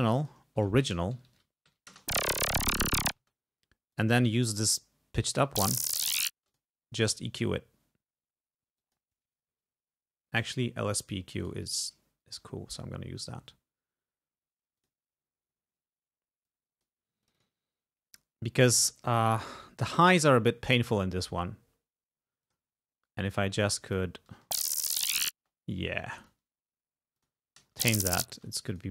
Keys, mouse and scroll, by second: 0.0 e, 0.2 click, 0.7 ctrl+a, 1.2 ctrl+alt+Down, 1.7 ctrl+alt+Up, 1.9 space, 3.2 space, 4.0 click, 4.4 click, 5.4 space, 6.4 space, 6.5 click, 7.3 right click, 8.8 click, 10.4 click, 11.5 right click, 14.8 click, 16.5 click, 17.3 click, 19.3 click, 20.0 click, 21.4 space, 22.5 click, 23.9 click, 24.5 space, 25.4 space, 26.3 click, 27.3 click, 27.6 space, 28.8 click.